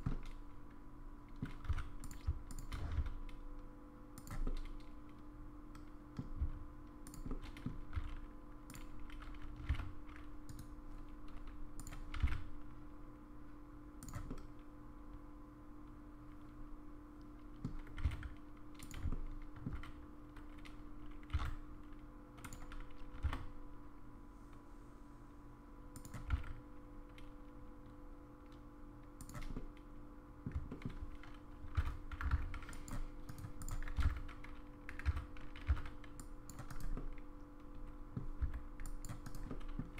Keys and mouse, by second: 0.1-1.4 middle drag, 1.7 3, 2.1 click, 3.0 s, 4.4-6.2 middle drag, 6.4 s, 7.3 middle click, 8.0 e, 9.6 g, 11.8 click, 12.6 g, 14.3-17.6 middle drag, 18.0 g, 19.1 shift+middle click, 21.4 e, 23.1 g, 29.5 middle click, 30.7 shift+middle click, 31.6 c, 33.6 click, 34.0 alt+z, 35.1 1, 35.7 c, 37.0-38.2 middle drag, 38.4 c, 39.5 middle click.